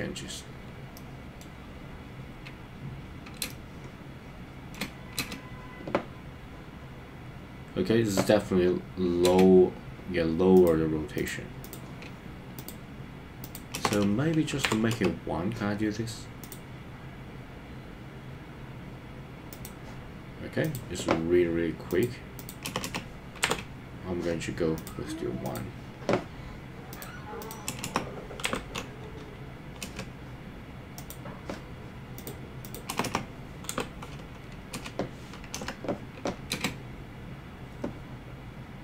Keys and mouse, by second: 0.9 middle click, 3.4 space, 3.5-4.7 middle drag, 4.7 space, 5.2 space, 9.2 space, 12.7-15.0 drag, 14.0 BackSpace, 16.4 click, 19.6 click, 21.9-24.9 drag, 22.9 BackSpace, 25.4 click, 27.0-29.9 drag, 27.9 BackSpace, 32.3-34.8 drag, 33.2 BackSpace, 35.6 KP_0, 36.6 space.